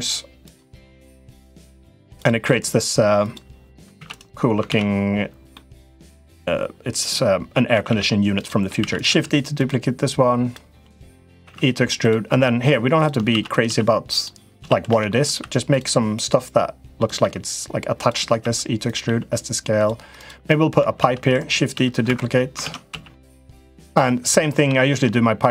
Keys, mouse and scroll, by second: 0.9 middle click, 2.2 middle click, 3.0 click, 3.7 shift+d, 4.4 ctrl+z, 5.3 middle click, 7.5 a, 7.6 a, 8.5 shift+d, 8.8 s, 9.9 click, 10.7 click, 11.2 e, 13.1 shift+d, 13.4 s, 14.3 s, 16.0 click, 17.0 e, 18.1 e, 18.8 s, 20.0 click, 20.7 shift+d, 21.5 right click, 21.8 Escape, 22.4 ctrl+z, 22.7 s, 23.7 click, 24.6 shift+middle click, 25.4-25.5 right drag.